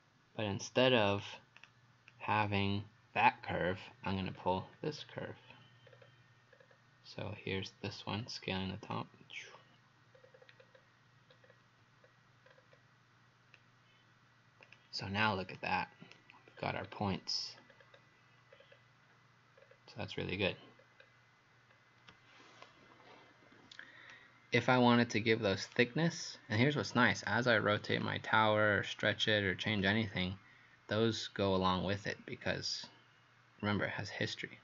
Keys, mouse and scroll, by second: 2.1 click, 4.1-4.6 scroll down 4, 4.9-5.9 scroll up 2, 5.9 scroll down 3, 6.6 scroll up 3, 8.1 scroll up 2, 8.9 click, 10.2-11.3 scroll down 5, 11.3 scroll down 1, 12.1-13.0 scroll up 6, 14.7 click, 15.6 right click, 16.6-17.6 scroll down 6, 17.6-18.5 scroll up 4, 18.5 scroll down 2, 19.6-20.0 scroll down 3, 20.8-21.7 scroll down 2, 21.7 scroll up 1, 24.1 right click, 28.0 click.